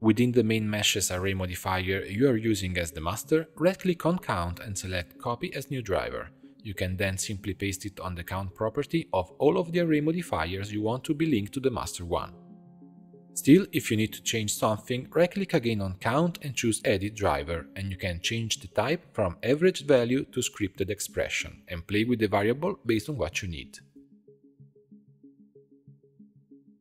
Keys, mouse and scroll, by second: 1.6-7.1 right drag, 7.1 click, 8.4-11.1 right drag, 11.1 click, 12.0 click, 12.9 scroll down 3, 13.1-15.2 middle drag, 15.2-18.6 right drag, 21.6-24.6 drag, 24.7 click, 25.2-25.5 scroll down 2, 25.5-26.8 middle drag.